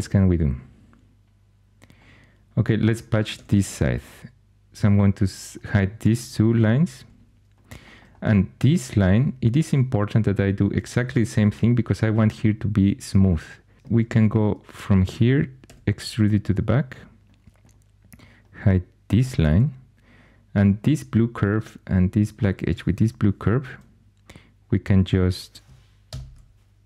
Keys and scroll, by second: 3.3 2, 6.9 h, 14.0 2, 15.6 e, 19.1 h, 26.1 shift+super+p.